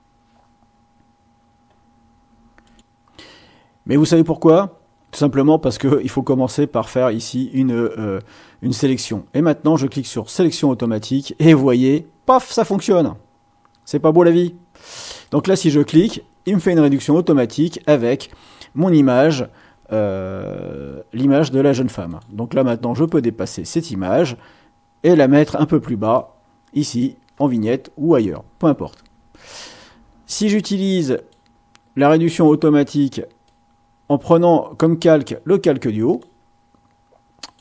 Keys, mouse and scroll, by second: 0.1 scroll down 1, 2.6 click, 5.9-8.0 drag, 10.3 click, 15.2 click, 22.1 click, 23.0-25.7 drag, 26.1 click, 30.4-31.5 drag, 32.3 click, 33.4-35.4 drag, 36.1 click, 37.5 click.